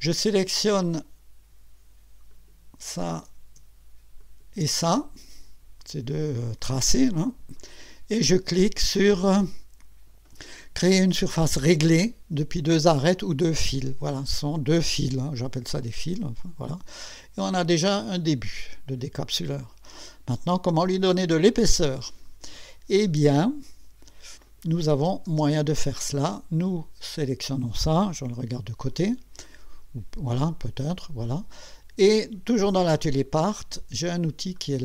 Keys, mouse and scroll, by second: 2.3 click, 4.2 ctrl+click, 15.8 click, 17.1-22.4 drag, 23.8 scroll down 1, 24.5 click, 25.3 space, 26.7 click, 28.2 1, 28.9-29.3 scroll up 2, 29.4-30.0 right drag, 34.6 click.